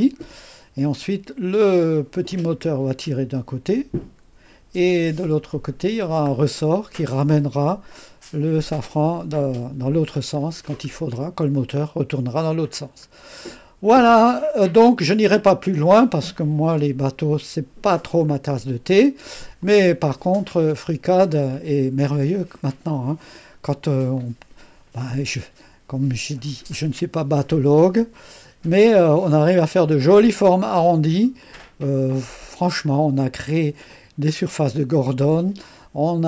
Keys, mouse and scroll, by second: 0.0-0.3 scroll down 2, 2.2 click, 2.5 space, 6.1-7.0 scroll down 3, 10.5-11.1 scroll down 3, 13.0-13.4 scroll down 3, 13.6-14.6 scroll up 1, 14.1-19.7 right drag, 19.7-21.1 drag, 24.2-29.6 drag, 31.4-33.9 drag.